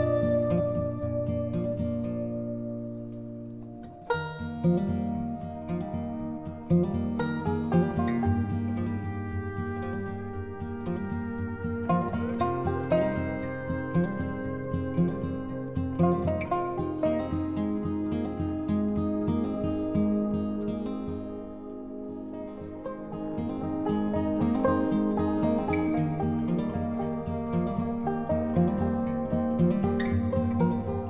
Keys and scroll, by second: 21.8 ctrl+t.